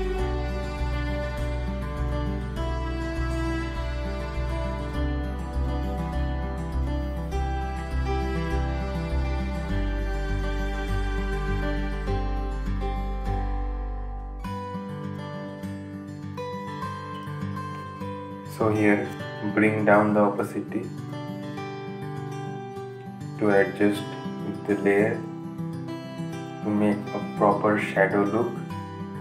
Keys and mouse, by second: 18.8-29.2 drag.